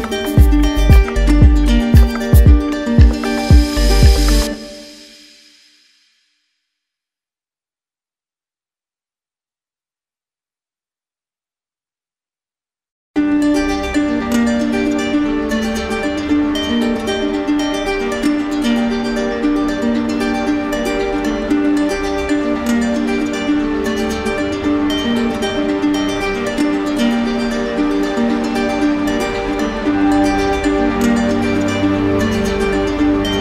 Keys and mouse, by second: 2.1 right click, 4.4-5.5 drag, 5.7 right click, 18.6 click, 19.7 right click, 22.2 right click, 24.9 click, 26.6 right click, 29.2-30.3 right drag, 30.4-31.4 right drag, 32.2-33.3 drag.